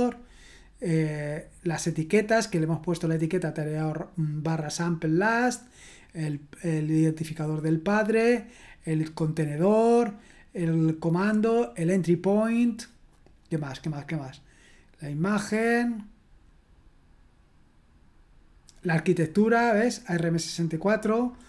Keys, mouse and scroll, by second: 5.4-6.3 scroll down 2, 6.3-8.2 scroll down 1, 8.2-9.2 scroll down 1, 9.6-10.8 scroll down 1, 13.1-14.0 scroll down 1, 14.9-15.8 scroll down 1, 15.9-16.9 scroll down 1, 19.3 click, 19.5 click.